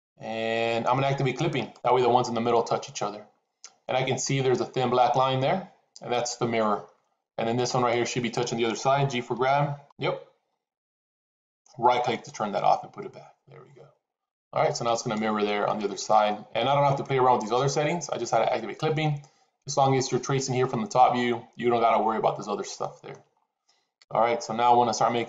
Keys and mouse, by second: 1.5 click, 7.5 click, 9.1 g, 14.9 click, 15.5 shift+middle click, 22.7 shift+middle click.